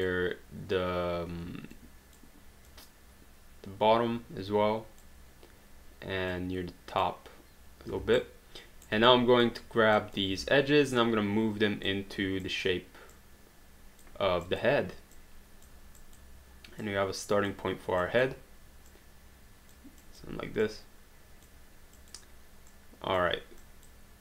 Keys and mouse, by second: 1.7 click, 6.3 click, 7.9 q, 8.1 right click, 9.1 click, 10.3 w, 11.0 click, 13.2 click, 14.4 click, 18.9 click, 20.0 click, 22.0 click.